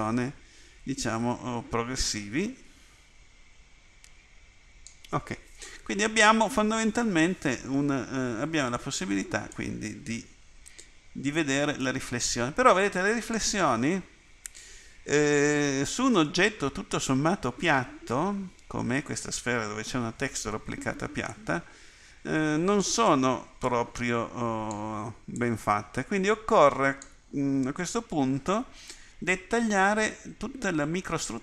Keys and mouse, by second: 21.3 click.